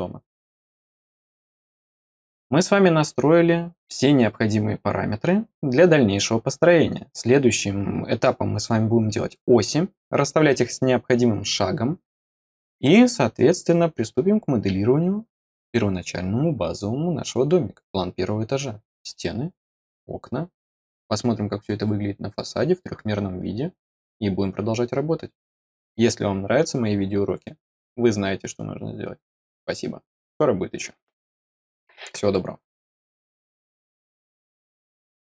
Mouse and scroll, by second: 1.5 middle click.